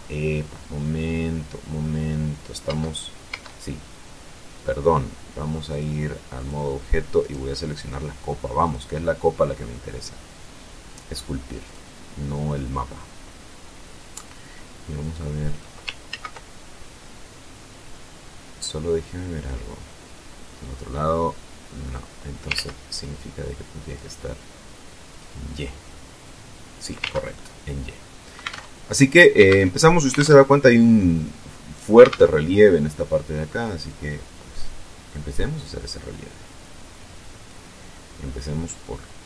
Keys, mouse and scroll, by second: 2.5 Tab, 5.5 click, 6.2 click, 7.0 right click, 8.4 click, 11.4 click, 14.8 click, 15.9 ctrl+z, 17.7-19.5 drag, 19.7-22.2 middle drag, 22.2-23.0 scroll up 2, 22.3 ctrl+z, 23.6 click, 24.9 click, 26.0 click, 26.8 ctrl+z, 27.2-28.3 ctrl+drag, 28.3 alt+Tab, 29.2 alt+Tab, 30.0 alt+Tab, 31.8 alt+Tab, 33.6-37.4 drag, 38.4-39.2 drag.